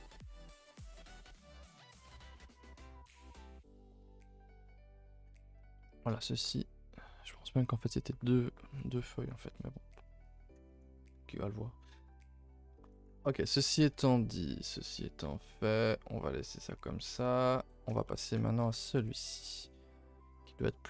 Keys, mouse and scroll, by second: 1.5-2.3 middle drag, 2.3 g, 2.9 Tab, 3.0 scroll down 5, 3.2 a, 3.3 a, 3.8-5.0 shift+middle drag, 5.0 a, 5.1 a, 5.8-10.3 shift+middle drag, 10.3 a, 10.4 a, 12.8 a, 12.9 a, 13.5 a, 13.6 a, 14.3-18.8 middle drag, 18.8 scroll down 2, 19.0-20.6 middle drag, 20.6-20.8 scroll up 2.